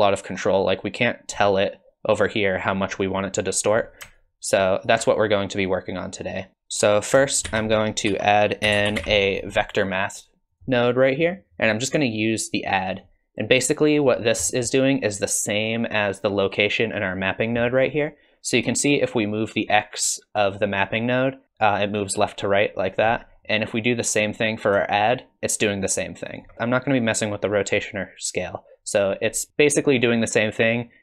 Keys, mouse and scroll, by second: 4.2 alt+click, 5.7 click, 6.5 click, 6.5 middle click, 7.5 shift+a, 14.1-14.5 scroll up 4, 14.5 middle click, 18.9 shift+click, 24.9 shift+click.